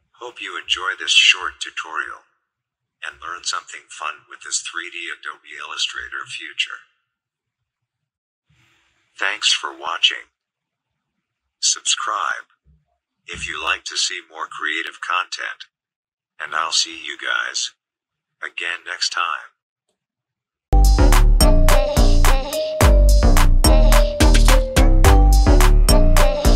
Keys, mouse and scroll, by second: 0.5 click, 3.3 click, 14.7 space, 15.0 click, 15.0 space.